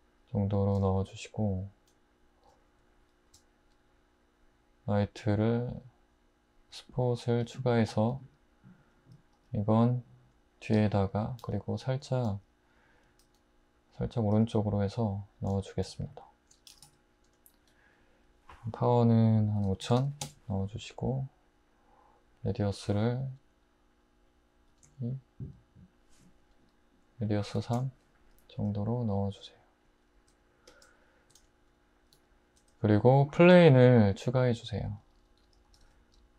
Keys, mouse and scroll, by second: 3.3 shift+a, 7.5 `, 8.0 r, 9.4 g, 10.8 `, 11.4 r, 12.3 g, 13.3 r, 14.4 g, 15.5 `, 16.7 typing, 19.6-20.2 typing, 24.7 typing, 27.6 typing, 33.4 shift+a, 35.7 typing.